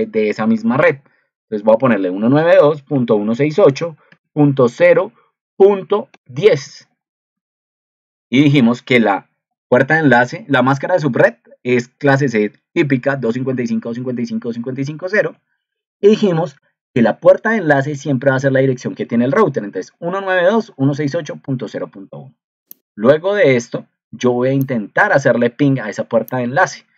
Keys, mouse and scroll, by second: 7.9 ctrl+c, 15.1 ctrl+v.